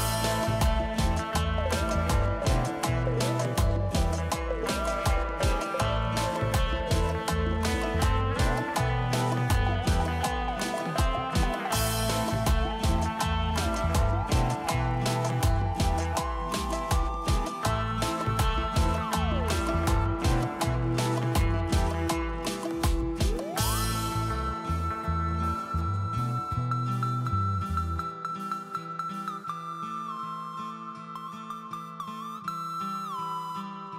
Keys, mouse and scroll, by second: 0.1 Delete, 1.3 Delete, 2.0 Delete, 2.3 scroll down 1, 6.0 right click, 22.1 ctrl+space, 22.8 ctrl+space, 27.4 scroll up 1.